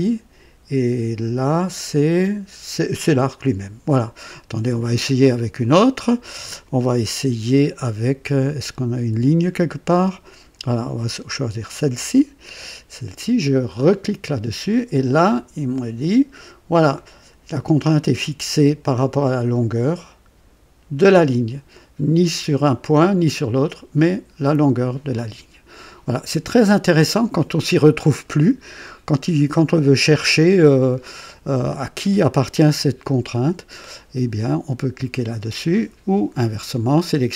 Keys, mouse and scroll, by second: 11.7 click, 13.8 click, 15.6-16.5 drag.